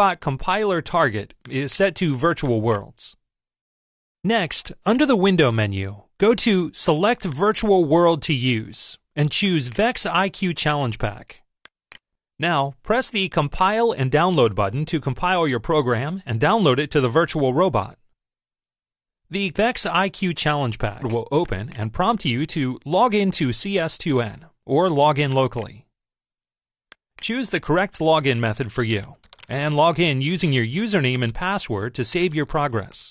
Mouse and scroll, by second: 1.5 click, 2.5 click, 4.7 click, 7.4 click, 9.5 click, 11.7 click, 13.3 click, 21.5 click, 25.3 click, 27.0 click.